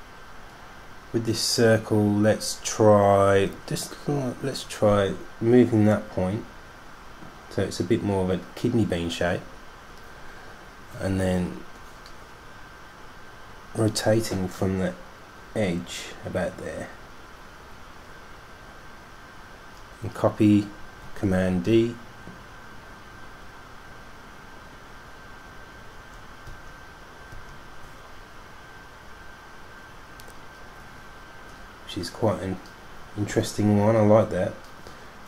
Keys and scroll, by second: 22.0 super+d, 22.5 super+d, 22.6 super+d, 22.6 super+d, 22.7 super+d, 22.8 super+d, 22.9 super+d, 23.0 super+d, 23.3 super+d, 23.6 super+d, 25.1 super+d, 25.3 super+d, 25.5 super+d, 25.8 super+d, 26.0 super+d, 26.4 super+d, 26.9 super+d, 27.2 super+d, 33.5 super+g.